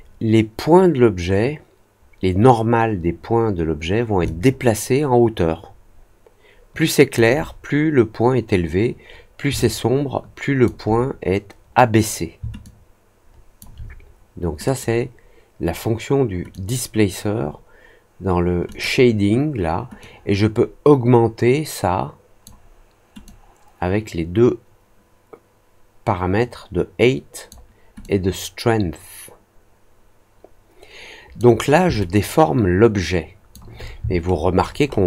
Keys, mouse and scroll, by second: 4.2-7.1 alt+drag, 9.5-10.6 alt+drag, 12.6-13.5 alt+drag, 14.6 click, 16.4 click, 18.6 click, 19.9-22.4 drag, 23.2-27.4 drag, 27.9-31.3 drag, 31.9-33.5 alt+drag, 34.1 alt+middle click, 34.5 alt+scroll up 1, 34.8 alt+middle click.